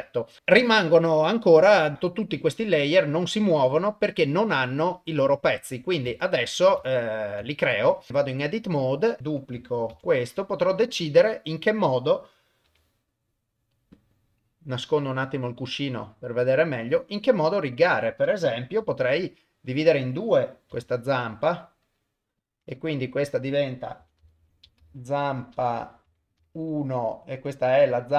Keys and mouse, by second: 1.5 click, 1.9 click, 3.1-3.9 drag, 4.8 click, 6.2-6.7 shift+middle drag, 6.9-7.3 ctrl+middle drag, 7.5 shift+middle drag, 8.1 Tab, 9.2 click, 9.9 shift+d, 11.5 click, 12.6 g, 15.5 click, 16.8 click, 17.8 click, 18.8 g, 20.7 e, 22.4 click, 22.9 F2.